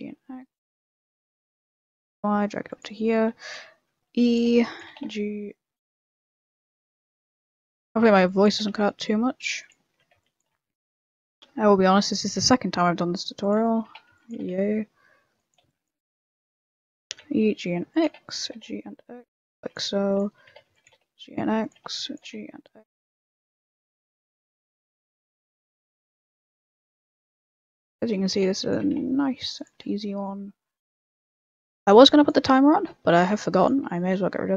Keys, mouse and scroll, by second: 0.0-1.1 typing, 2.9 shift+middle click, 3.3-4.8 typing, 3.7 shift+middle click, 7.9 a, 8.2 b, 8.5 g, 9.8 shift+middle click, 9.8 shift+scroll down 1, 10.1-12.2 typing, 11.0 click, 13.6 shift+middle click, 13.8 a, 14.1 b, 14.3 g, 15.6-17.0 typing, 16.4 shift+middle click, 18.0 a, 18.2 b, 18.4 g, 19.5-23.4 typing, 20.2 shift+middle click, 24.6-28.7 typing, 25.0 shift+middle click, 26.2 shift+middle click, 27.1 shift+middle click, 29.8 shift+middle click, 30.8 a, 31.8 b, 32.9 e, 33.8 a.